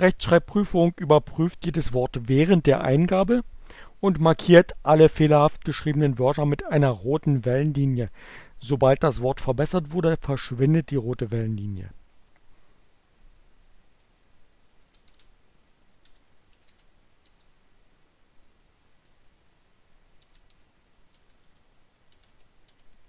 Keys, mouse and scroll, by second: 11.9 shift+r, 14.3-15.4 typing, 16.5 t, 17.2 Right, 20.0 c, 20.6 r, 21.1 Down, 22.0 e, 22.1 space.